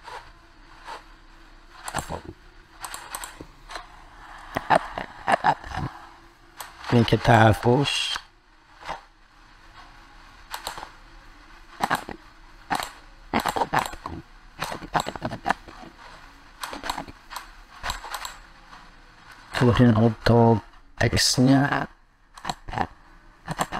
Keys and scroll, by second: 11.1 ctrl+z.